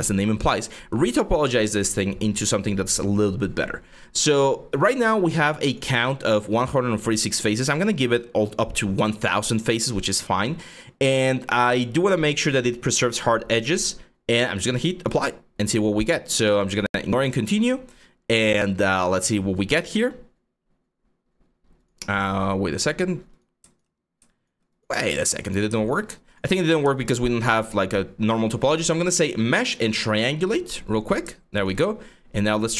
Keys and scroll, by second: 23.6 4, 24.6 5.